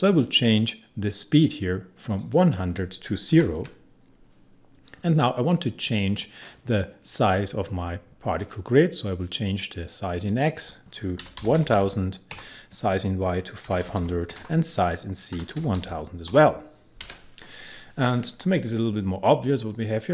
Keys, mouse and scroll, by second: 2.1 click, 3.3 0, 10.3 click, 10.9-12.2 typing, 12.3 Tab, 13.4-16.2 typing.